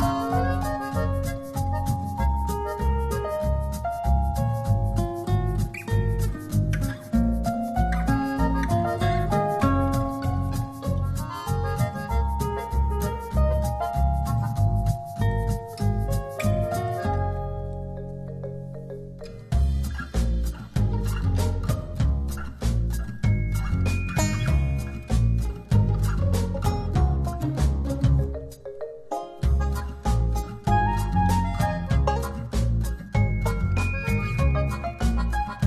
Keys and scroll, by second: 0.8 space, 22.0 z, 23.6 a, 26.6 shift+v, 27.3 alt+shift+v, 27.4 alt+shift+v, 30.2 alt+shift+super+d, 32.0 super+space.